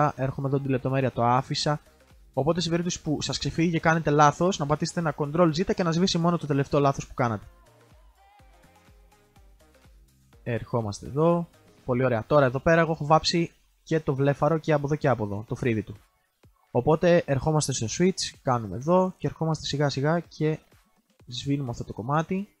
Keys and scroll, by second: 5.3 ctrl+z.